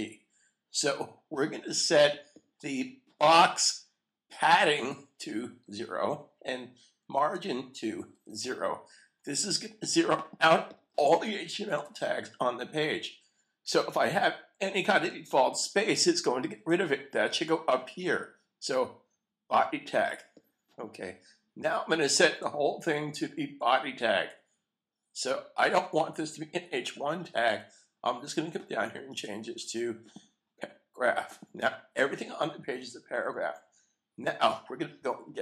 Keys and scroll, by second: 7.1 Tab, 10.2 0, 11.7 super+s, 22.9 super+a, 33.0 super+a.